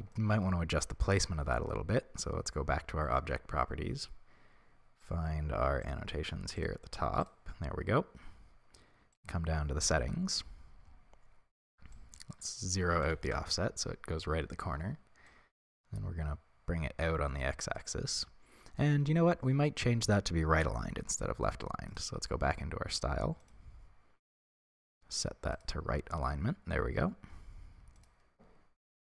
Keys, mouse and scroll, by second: 1.0-5.7 scroll down 2, 5.7-9.1 scroll down 1, 9.1 click, 13.3-23.5 shift+drag, 13.4 Return, 23.8-25.6 scroll down 1, 25.6-29.1 drag.